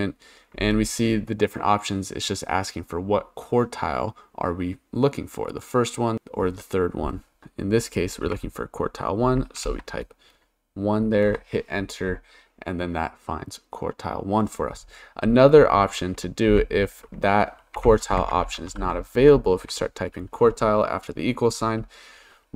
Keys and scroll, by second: 8.2 1, 9.6 shift+0, 11.3 Return, 16.5-20.1 typing.